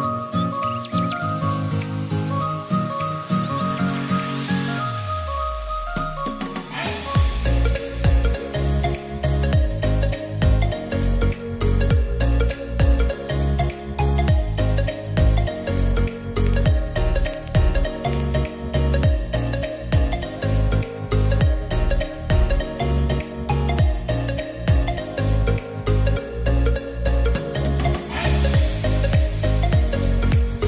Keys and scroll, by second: 0.5-1.4 typing, 7.3-8.3 typing.